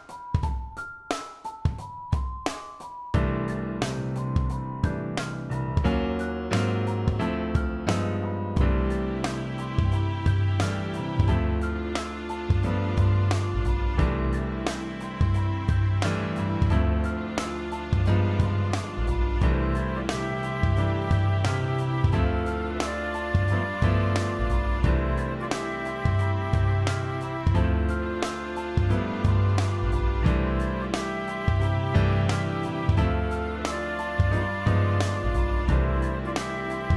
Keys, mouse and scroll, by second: 22.7-23.9 alt+drag.